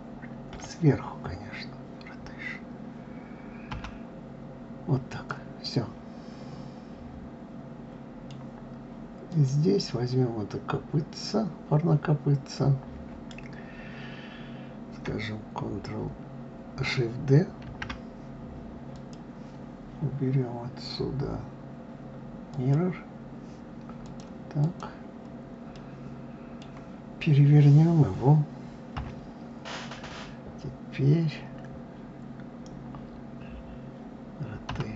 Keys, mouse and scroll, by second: 0.5 KP_7, 5.6-8.7 middle drag, 9.3 click, 17.7 shift+d, 22.5 click, 24.0 click, 24.6 click, 25.7-28.7 middle drag, 28.9 KP_3.